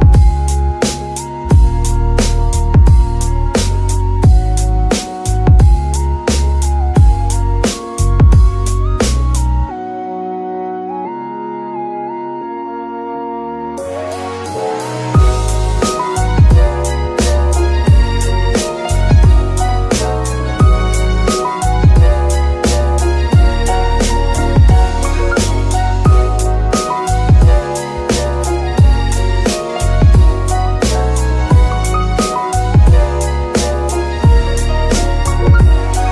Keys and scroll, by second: 0.7 ctrl+s, 12.4 g, 12.8 Escape, 13.1 Tab, 13.5 Tab, 20.1 g, 20.3 y, 21.7 Escape.